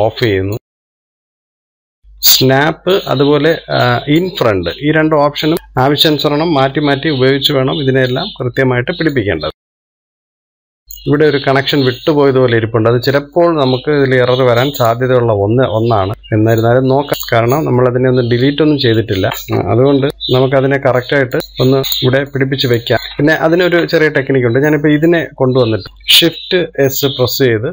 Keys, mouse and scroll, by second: 0.8 click, 1.4 click, 3.5-5.0 middle drag, 5.0 click, 5.5 middle click, 6.0 click, 6.6-7.7 middle drag, 7.7 KP_3, 9.2 click, 9.8 shift+middle click, 10.5 click, 11.5 middle click, 12.0-13.8 scroll up 1, 13.8-14.8 middle drag, 14.8 click, 16.1 middle click, 16.8-17.1 scroll up 1, 17.1 click, 17.6 click, 18.6 click, 19.5 scroll up 1, 20.0 shift+middle click, 20.1-20.7 scroll up 1, 20.7 KP_3, 21.8 click, 22.7 click, 24.5 shift+middle click, 25.0-25.8 scroll up 1, 26.5-27.7 shift+middle drag.